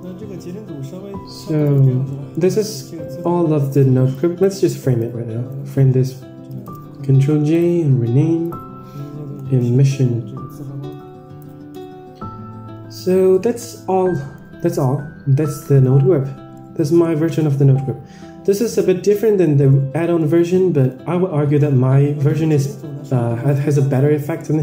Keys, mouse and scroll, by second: 0.2 Tab, 1.5 click, 1.7 Tab, 2.0 middle click, 2.3-2.7 scroll down 4, 2.6 middle click, 3.2-3.6 middle drag, 4.1 click, 4.9 click, 6.6 ctrl+j, 7.5-11.8 right drag, 13.2 ctrl+s, 13.2 middle click, 13.6 Tab, 14.0 middle click, 14.5-14.9 scroll up 4, 15.4-15.8 middle drag, 16.0 Tab, 16.5-16.9 middle drag, 17.3 middle click, 17.7-18.4 scroll down 10, 18.4-18.8 middle drag, 19.0-19.4 middle drag, 19.6-19.9 middle drag, 20.1-20.4 middle drag, 20.7-22.0 scroll down 2, 20.9-22.5 middle drag, 23.4 click, 24.3 middle drag.